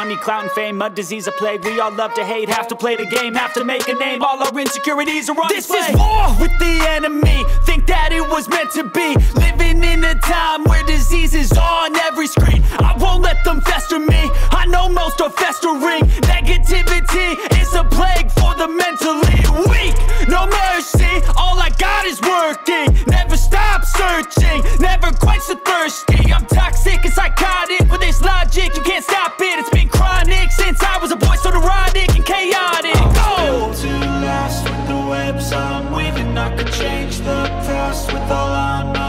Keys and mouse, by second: 0.0 click, 2.0-2.6 middle drag, 3.2 click, 4.4 shift+middle click, 4.7 shift+middle click, 5.1 middle drag, 5.4-5.8 shift+middle drag, 6.4 middle click, 6.7-7.6 shift+middle drag, 10.1 click, 10.7 click, 13.3 click, 14.2-14.7 drag, 15.0-15.4 shift+middle drag, 15.7 middle click, 19.7-21.0 drag, 21.5-23.9 middle drag, 24.7 click, 26.8 click, 27.6-27.9 middle drag, 28.0 shift+middle drag, 28.4 middle click, 28.8 middle click, 29.8 middle click, 30.1 click, 30.7-32.0 drag, 32.1 middle drag, 33.0 middle click, 33.0 ctrl+z, 33.0 KP_1, 33.4 shift+a, 35.3 middle drag, 35.3 shift+a, 36.0 click, 37.1 KP_0, 38.2-39.0 drag.